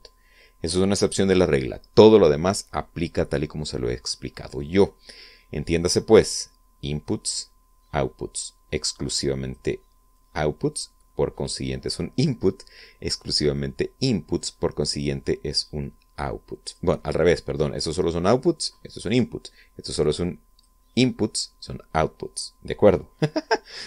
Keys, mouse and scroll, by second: 9.7-10.5 drag, 10.9-11.7 drag, 14.3-17.7 drag, 19.6 click, 20.7-21.6 drag.